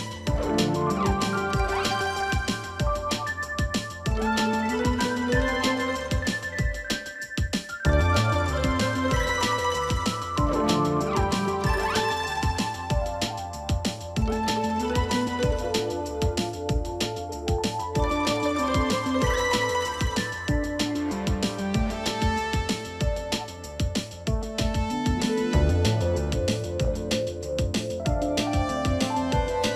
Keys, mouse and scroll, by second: 7.3 double click, 7.7 double click, 11.2-12.5 typing, 21.4 double click, 26.6 double click.